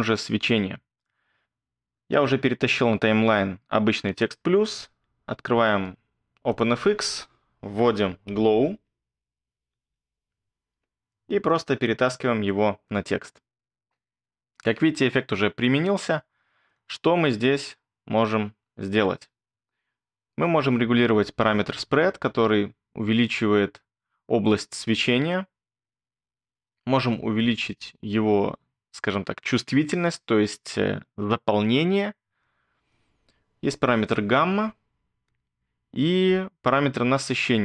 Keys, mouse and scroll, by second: 8.1-9.9 typing.